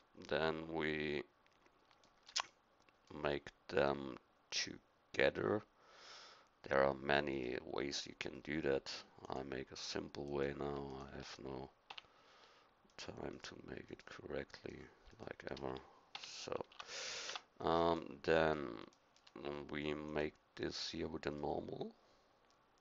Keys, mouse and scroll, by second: 2.7 middle click, 11.9 f, 16.1 f, 16.7 Tab, 17.3 Tab, 21.7 middle click.